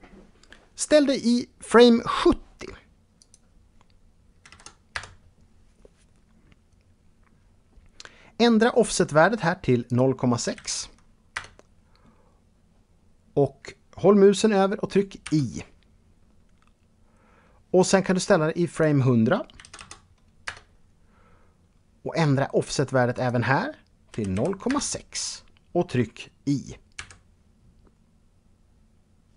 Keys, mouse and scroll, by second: 2.7 click, 4.0 KP_0, 4.5 Return, 9.4 click, 10.0 KP_Decimal, 10.9 Return, 18.3 click, 19.1 KP_1, 19.3 KP_0, 20.0 Return, 22.7 click, 23.6 KP_Decimal, 23.9 KP_6, 24.2 Return.